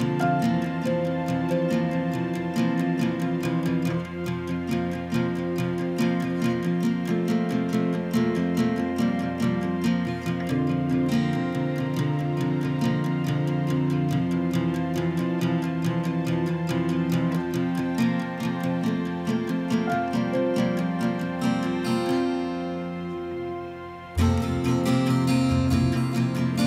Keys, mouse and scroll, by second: 0.4-1.6 typing, 3.0 click, 5.8-9.1 typing, 9.3 right click, 17.9 click, 18.6-20.5 typing, 23.3 a, 23.7 right click, 25.6 click.